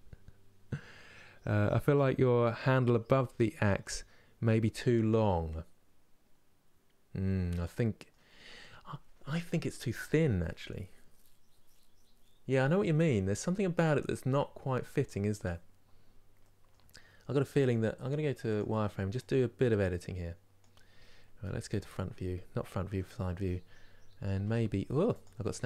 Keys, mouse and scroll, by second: 4.7-5.2 scroll down 1, 5.2-18.2 middle drag, 18.2 click, 20.3 click, 21.4 KP_1, 24.0 g.